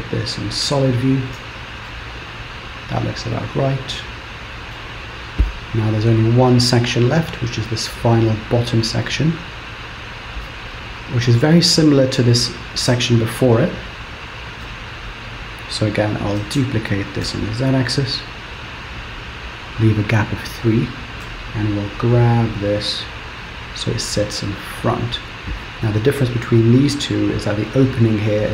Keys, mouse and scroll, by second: 1.9 middle click, 13.0 KP_7, 14.7 KP_3, 16.5 shift+d, 21.3 g.